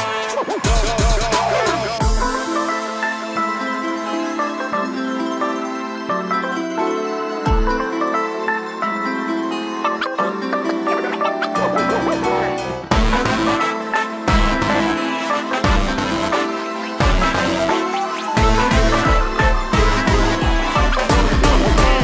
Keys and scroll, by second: 1.7 space, 2.9 ctrl+g, 5.5 shift+Escape, 13.0 Escape.